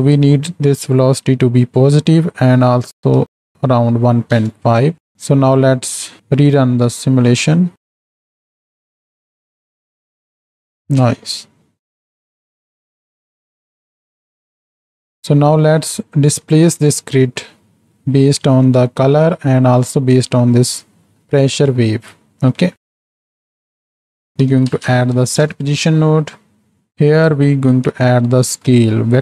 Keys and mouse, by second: 0.0-4.4 drag, 5.1 shift+Right, 5.1 shift+Left, 5.3 z, 6.8 KP_7, 7.6 z, 7.9 click, 8.2 space, 9.3 drag, 11.1 space, 11.6 shift+Left, 11.6 space, 15.0 click, 15.0 space, 16.3 KP_7, 17.9 click, 18.4 click, 19.6 drag, 23.3-26.7 drag, 27.0-29.2 drag.